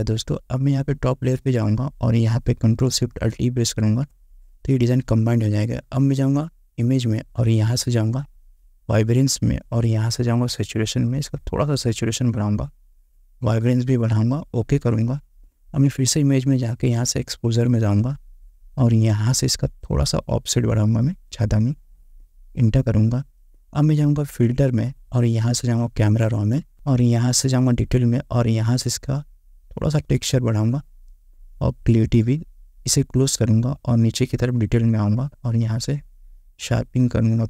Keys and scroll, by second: 4.0 ctrl+alt+shift+e.